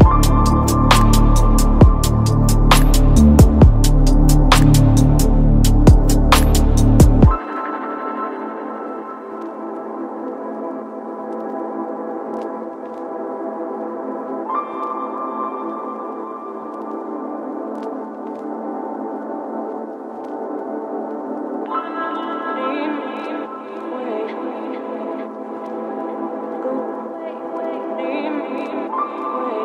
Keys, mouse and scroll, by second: 3.2-5.6 typing, 6.8-9.8 typing, 7.8 Return, 10.4 Right, 10.9 Return, 11.9-13.9 typing, 16.3 click, 16.8 Return, 17.6 shift+3, 17.9 space, 19.4 t, 19.4 i, 20.5-24.7 typing, 22.7 Return, 25.8 click, 26.4-29.2 typing, 27.8 Return.